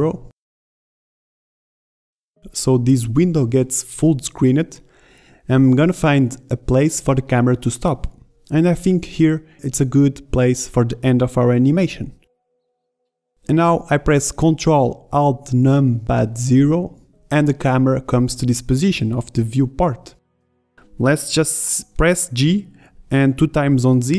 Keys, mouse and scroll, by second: 1.4 click, 1.6 click, 5.1 ctrl+Up, 17.1 ctrl+alt+KP_0.